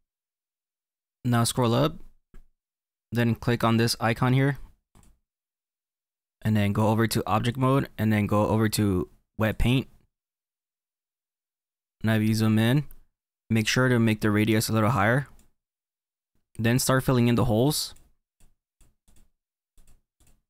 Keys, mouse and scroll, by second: 1.1 middle click, 5.0 click, 9.8 click, 10.7 middle click, 11.4-13.5 scroll up 7, 14.9 click, 16.3 click, 17.4-20.4 drag.